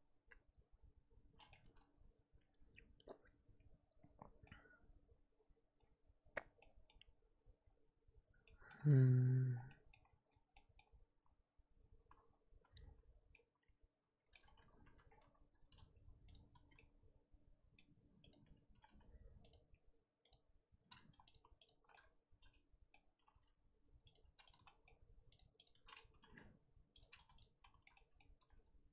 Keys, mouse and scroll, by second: 1.5-4.5 middle drag, 13.3-14.4 middle drag, 14.4-14.8 scroll up 2, 14.8 3, 16.3 click, 16.6 scroll down 2, 16.7-18.3 middle drag, 18.3 click, 18.8 g, 19.9-20.3 scroll up 2, 20.3 click, 21.3 shift+click, 21.6 shift+click, 21.9-23.1 middle drag, 23.1 g, 24.5 click, 24.8 shift+middle click, 25.5 shift+click, 26.2 g, 27.4 click, 27.6 shift+middle click, 28.4 g.